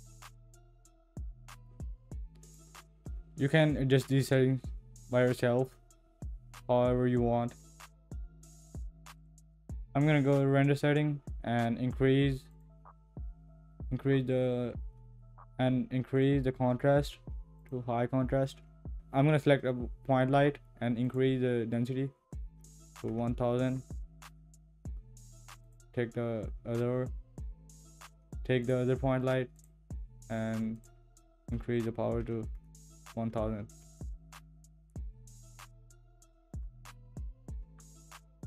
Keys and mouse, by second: 12.5 click, 16.1-17.7 drag, 21.1-23.6 drag, 28.6 click, 29.7-33.8 drag.